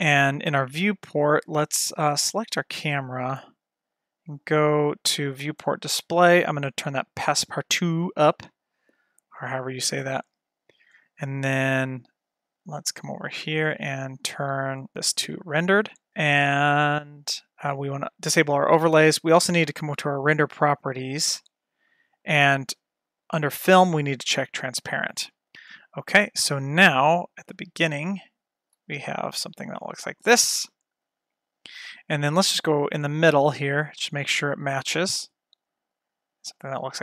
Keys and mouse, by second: 2.3 click, 5.5 click, 6.8 click, 9.5 click, 15.1 click, 18.3 click, 20.0 click, 23.3 click, 24.7 click, 28.1 click, 31.1 F12, 32.5-33.4 drag, 36.1 F12.